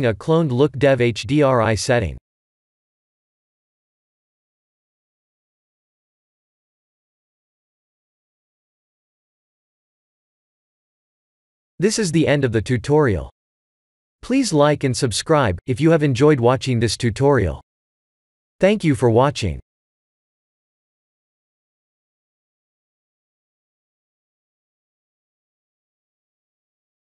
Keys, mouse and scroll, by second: 2.9 click, 3.5 click, 3.7 click, 5.3 click, 9.7 click, 10.1 click, 10.8 ctrl+s.